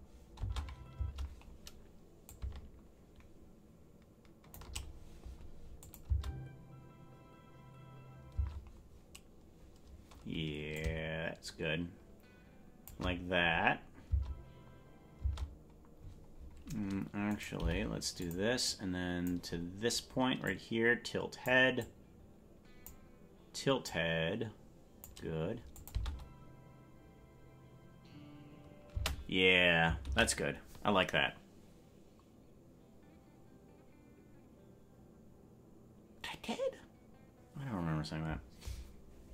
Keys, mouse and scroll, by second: 0.4 space, 1.0 space, 2.2-4.6 drag, 5.9-8.5 drag, 6.1 space, 8.5 space, 10.7-12.9 drag, 15.3 space, 16.0-17.3 scroll up 12, 17.3 right click, 17.3-17.6 scroll up 1, 17.6 g, 18.7 click, 20.4-21.5 drag, 21.8-22.9 drag, 23.8-25.1 drag, 25.8 click, 26.1 space, 29.0 space, 33.4 ctrl+s.